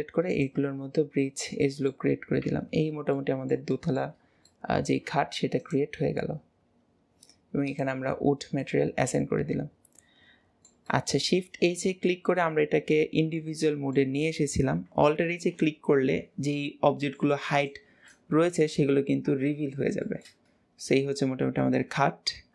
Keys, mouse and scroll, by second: 0.8-1.2 scroll up 1, 1.2-1.6 scroll down 2, 1.6 middle click, 2.2-3.2 scroll down 5, 2.5 Tab, 3.2-5.6 middle drag, 5.6-8.2 drag, 8.2-8.7 scroll down 3, 8.7-14.0 middle drag, 15.4 alt+h, 16.6-17.6 middle drag, 17.6 click, 18.1 middle click, 19.0 ctrl+s, 19.5 scroll up 2, 20.1-22.5 shift+middle drag.